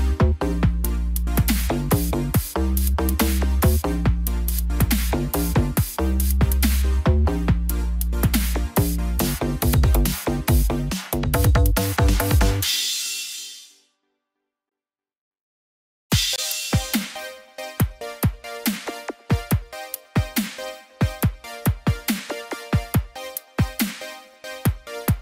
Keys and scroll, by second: 1.2 ctrl+z, 2.5 ctrl+-, 3.1 ctrl+0, 17.2 ctrl+-.